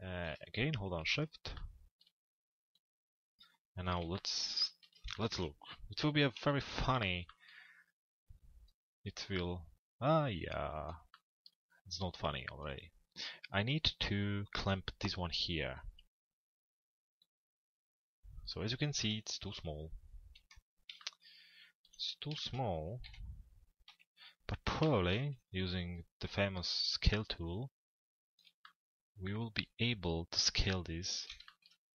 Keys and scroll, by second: 5.9 f, 6.7 z, 18.8 p, 22.7 p, 23.9 z, 27.0 z.